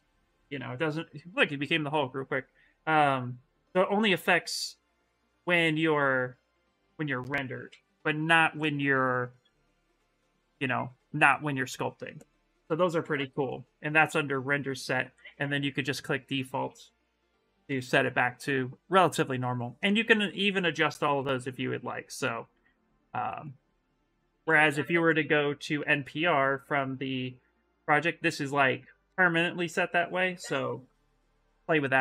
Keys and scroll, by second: 1.4 ,, 9.4 ,, 12.9 ,, 16.9 ,, 17.4 shift+r, 24.2 ,.